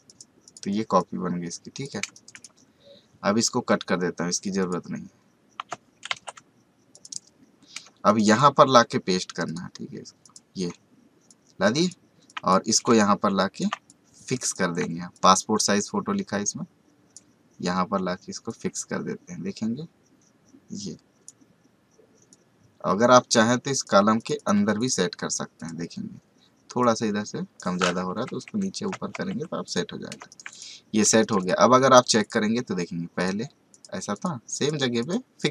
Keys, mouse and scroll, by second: 2.0 space, 2.1 right click, 2.3 click, 4.6 click, 6.0 ctrl+w, 6.9 click, 7.8 space, 8.0 right click, 8.2 click, 12.9 ctrl+click, 13.1 ctrl+click, 13.4 ctrl+space, 15.1-28.3 drag, 28.3 Down, 29.6 click, 30.2 space, 30.2 right click, 30.4 click, 31.1 space, 31.2 right click, 31.4 click.